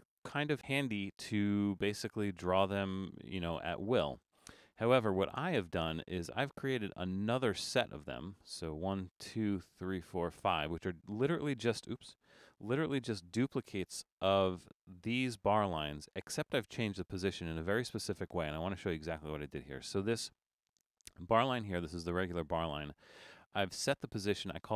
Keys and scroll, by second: 12.4 BackSpace.